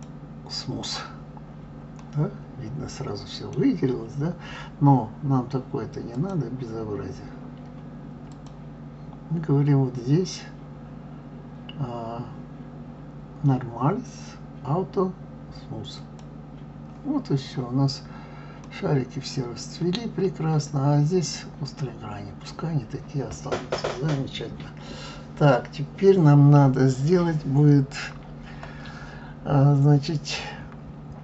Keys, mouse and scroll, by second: 2.0-5.0 middle drag, 6.1 click, 8.3 click, 16.0 click, 17.4 scroll up 1, 18.1-18.4 scroll up 4, 18.7-21.7 middle drag, 22.6 scroll down 1, 23.4-23.7 scroll up 1, 23.7 scroll down 2, 27.0-27.6 scroll down 2, 27.6-30.6 scroll up 2.